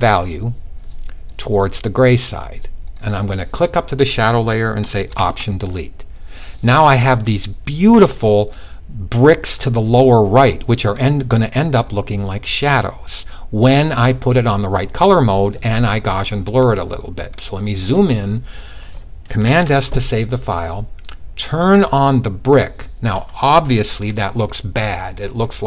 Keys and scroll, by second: 18.9 super+s.